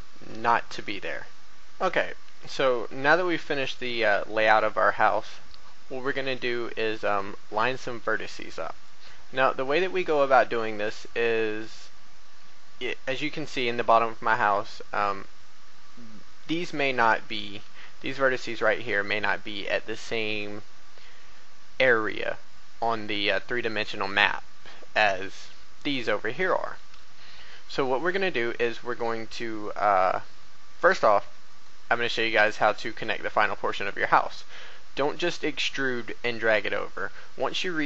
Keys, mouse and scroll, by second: 0.6 shift+middle click, 1.4 click, 7.1-7.6 scroll up 1, 8.1 shift+middle click, 17.5-17.8 scroll up 1, 18.0 shift+middle click, 30.9 right click, 31.4 shift+right click, 32.8 shift+right click, 33.2 shift+right click.